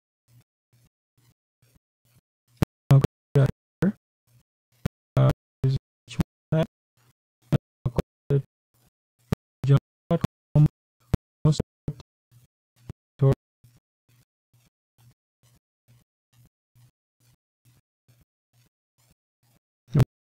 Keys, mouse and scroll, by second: 0.0-6.0 typing, 10.3 click, 11.5 Return, 15.3 BackSpace, 16.8 Down, 19.8 shift+,.